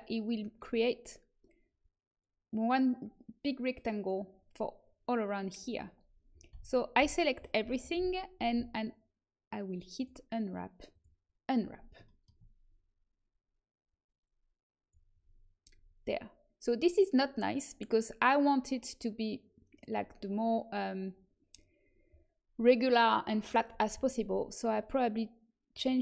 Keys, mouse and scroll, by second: 6.5 a, 6.9 a, 9.9-12.8 drag, 14.1 click, 14.4 right click, 14.5 click, 14.8 click, 24.7-26.0 drag.